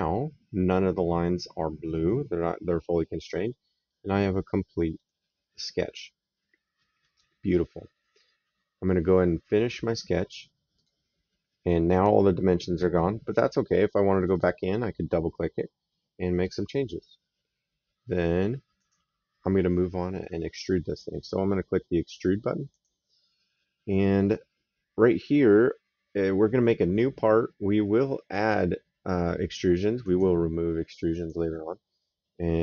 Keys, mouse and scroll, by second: 3.1 right click, 6.6 middle click, 10.6 click, 14.0 click, 18.6 click, 22.5 click, 28.1 click, 29.8 click, 30.9 click.